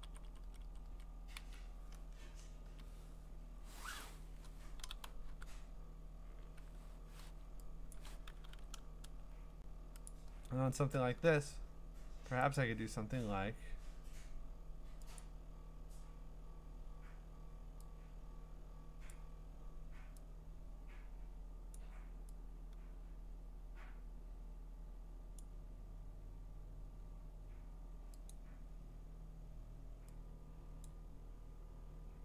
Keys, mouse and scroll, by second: 0.0 Up, 0.6 Up, 1.4-4.4 Down, 2.6 Return, 4.8-5.2 typing, 6.6 6, 8.0 6, 8.1 click, 8.5 v, 9.3-10.1 scroll, 10.1 click, 10.7 scroll, 12.5 click, 15.2 click, 19.1 click, 21.7 click, 25.4 click, 28.3 click, 30.9 click.